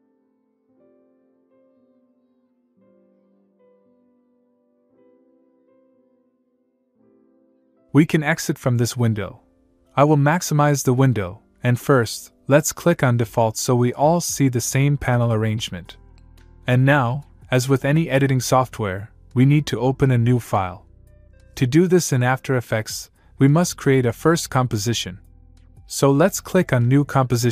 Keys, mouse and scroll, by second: 7.6-8.1 click, 10.8 click, 13.8 click, 14.3 click.